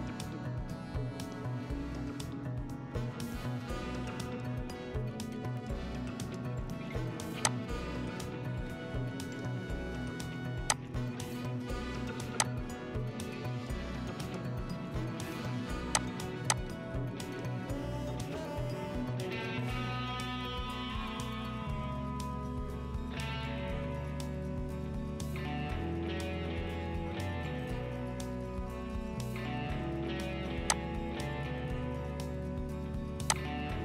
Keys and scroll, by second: 1.0 ctrl+-, 6.5 F10, 9.0 typing, 18.2-23.6 typing, 25.0-26.2 typing.